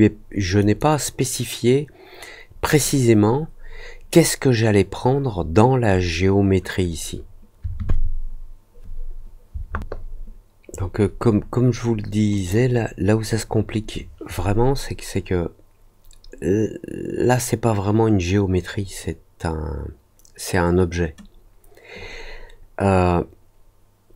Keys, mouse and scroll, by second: 0.5 click, 2.6 click, 12.3 click.